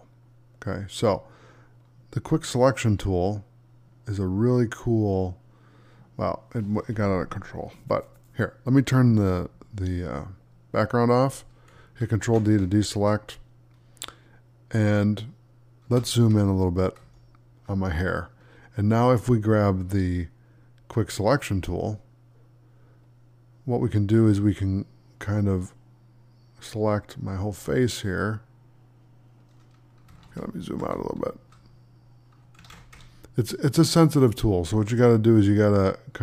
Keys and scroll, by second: 12.1 ctrl+d, 16.9 space, 30.8 space, 32.6 ctrl+d.